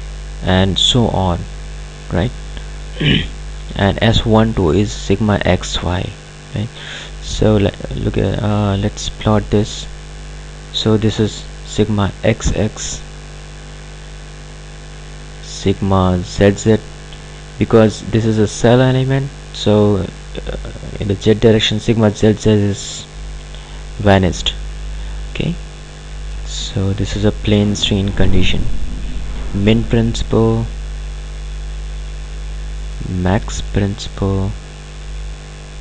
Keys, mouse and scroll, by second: 9.4 click, 13.6 click, 25.1 click, 31.1 click, 35.6 scroll up 1.